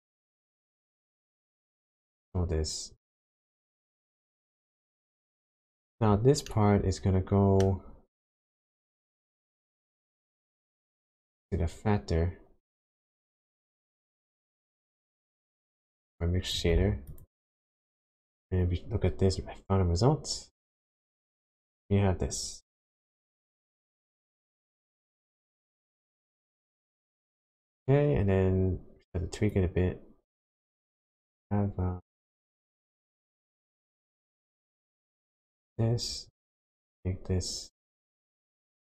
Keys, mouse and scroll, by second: 2.2 click, 6.5 middle click, 10.6 click, 15.4 click, 17.2 ctrl+shift+click, 23.5 shift+middle click, 26.8 shift+middle click, 29.5 click, 34.6-35.0 scroll down 2, 35.0 middle click, 36.1-36.8 scroll up 6, 37.8 click.